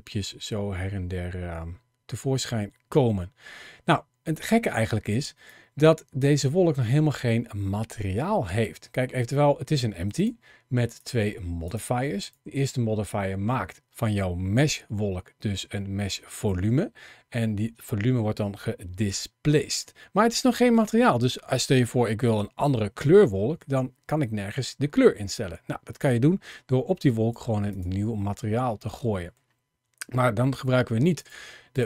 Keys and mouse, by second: 5.3 click, 10.0 click, 10.8 click, 11.4 click, 12.0 click, 26.9 click, 28.7 middle click, 31.0 click, 31.5 click.